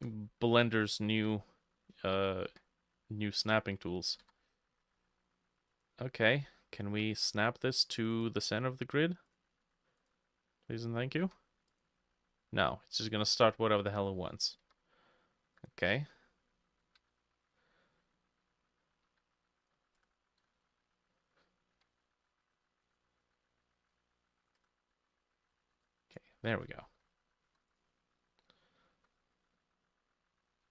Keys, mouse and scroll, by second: 0.0-8.9 shift+drag, 0.0 shift+middle click, 1.2 c, 2.5 k, 4.3 Escape, 6.9 Escape, 11.3-16.7 drag, 11.3 k, 12.7 Escape, 17.1-19.1 drag, 17.1 z, 19.1-30.7 drag, 19.1 c, 20.1 Return, 21.8 k, 23.3 z, 24.0 c, 24.6 Return, 25.6 ctrl+middle click, 25.8 ctrl+r, 26.4 Escape, 26.9 z.